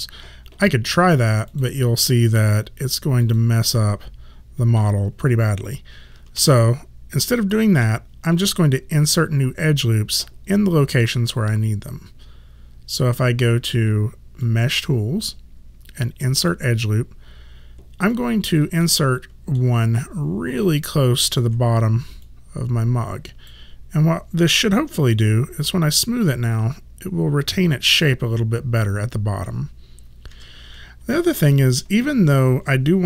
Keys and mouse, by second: 1.5 click, 3.9 middle click, 6.4 ctrl+z, 14.4 click, 18.2 alt+click, 18.9 alt+middle click, 20.9 alt+click, 25.7 3, 30.4 1, 31.2 alt+middle click.